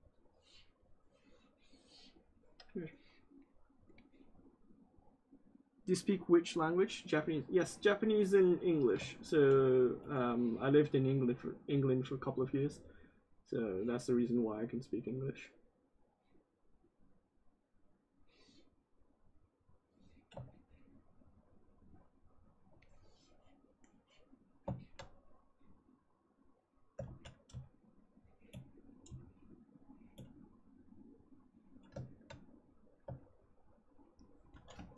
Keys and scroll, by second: 26.9 ctrl+z.